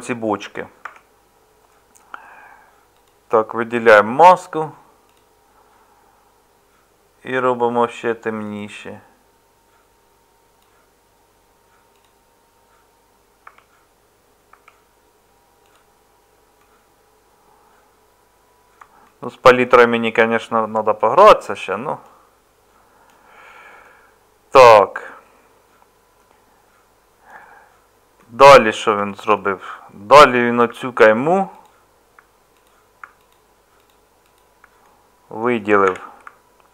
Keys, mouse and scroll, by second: 0.9 Tab, 13.4 Tab, 14.5 Tab, 29.0 Tab, 35.9 2.